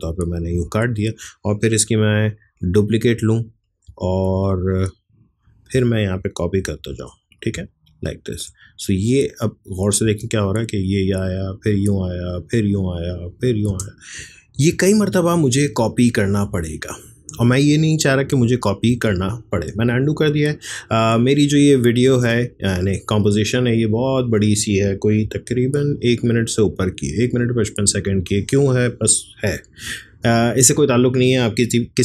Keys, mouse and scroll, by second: 2.4 ctrl+d, 3.6-6.6 drag, 6.6 ctrl+d, 7.3-9.0 drag, 9.0 click, 10.0 space, 13.7 space, 14.5 ctrl+z, 19.0 ctrl+z, 22.1-25.2 drag, 25.2 ctrl+k, 29.4 click.